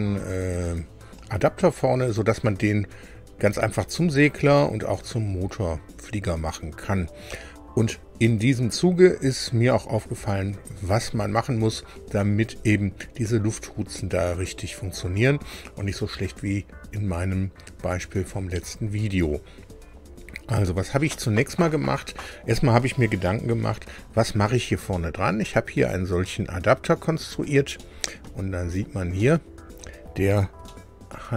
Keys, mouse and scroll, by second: 24.0-24.6 scroll up 4, 24.9-27.6 drag, 27.8-29.0 drag, 29.2 click, 30.6 shift+click.